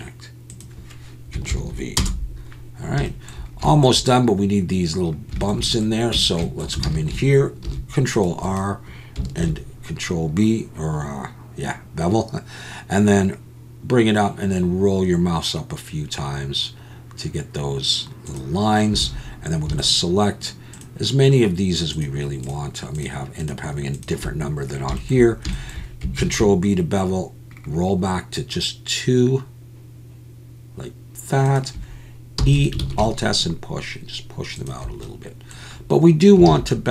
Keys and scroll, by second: 6.1 Tab, 6.8 alt+a, 7.7 ctrl+r, 9.4 ctrl+b, 19.0 alt+a, 26.2 ctrl+b, 32.4 e, 32.8 alt+s, 36.5 alt+a.